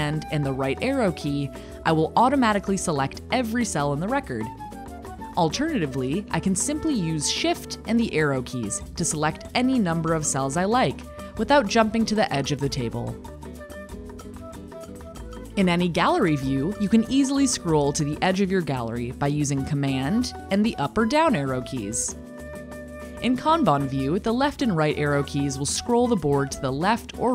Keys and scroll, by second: 10.6 shift+Right, 18.1 super+Up, 24.3 Left, 24.5 Right.